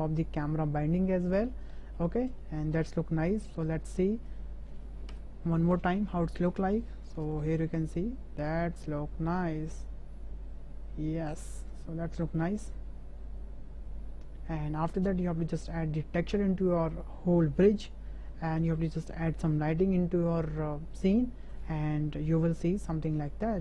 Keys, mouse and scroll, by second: 1.1 shift+click, 1.8 shift+drag, 2.4-2.8 middle drag, 3.6 click, 4.3 click, 5.1 KP_0, 6.4 drag, 7.5 space, 14.9 space, 16.9 click.